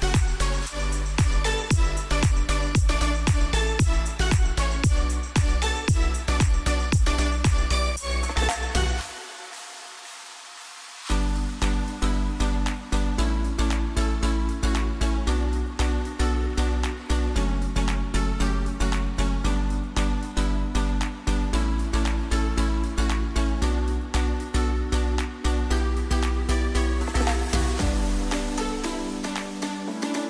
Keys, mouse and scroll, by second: 1.9 click, 2.0 alt+scroll up 1, 2.5 click, 3.6 Left, 8.8 alt+scroll up 1, 9.7 right click, 11.1 click, 12.2 alt+scroll up 1, 16.9 click, 18.3 alt+scroll up 1, 22.6 click, 23.1 click.